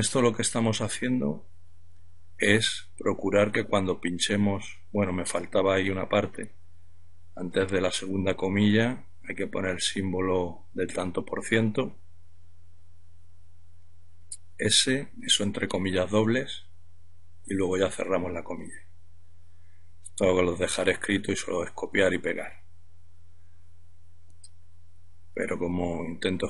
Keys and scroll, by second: 2.4 shift+', 7.4 ½, 10.5 shift+5, 13.2 typing, 14.7 typing, 17.7 ', 20.5 Return, 23.2-25.2 typing, 26.2-26.4 typing.